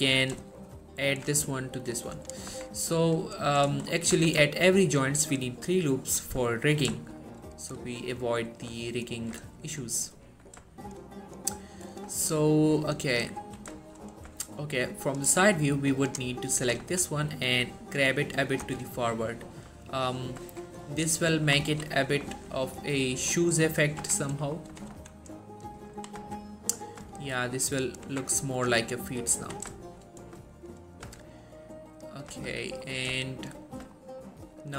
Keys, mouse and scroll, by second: 0.8 alt+shift+click, 2.6 Tab, 3.0-3.6 scroll down 1, 3.9 shift+middle click, 4.0 scroll up 1, 4.2 Tab, 4.6 shift+middle click, 4.9-5.7 scroll up 1, 6.4 scroll down 1, 6.6 shift+middle click, 9.7 shift+middle click, 10.2-10.7 scroll down 1, 10.8 shift+middle click, 11.8-12.2 scroll up 1, 12.3 shift+middle click, 13.5 3, 13.9 shift+middle click, 14.1 shift+scroll up 2, 14.4 z, 15.6-16.5 click, 16.7 g, 16.9 y, 18.6 click, 18.7 z, 19.1 scroll down 1, 19.3-19.9 middle click, 20.0 1, 20.6 Tab, 20.9-21.8 middle drag, 22.4 typing, 22.9 scroll up 1, 23.5 scroll down 1, 23.6 middle click, 24.1 Tab, 24.3 middle click, 24.5 scroll up 1, 24.8 g, 25.0 y, 25.7 click, 26.3 4, 26.9 scroll down 1, 27.0 middle click, 28.2 Tab, 28.7 click, 28.8 scroll down 1, 29.0 middle click, 29.5 1, 29.9 shift+middle click, 30.2-30.5 scroll up 1, 30.6 shift+middle click, 31.2 z, 31.3-32.0 scroll up 1, 32.0 click, 32.5 z, 33.0 scroll down 1, 33.4 shift+middle click.